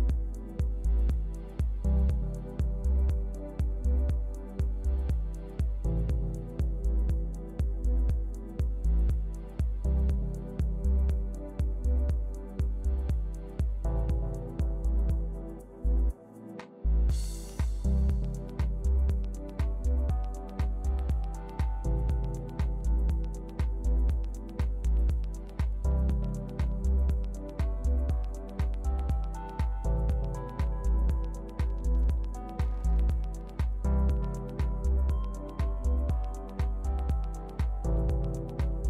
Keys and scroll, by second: 6.6 shift+Left, 8.5 shift+Right.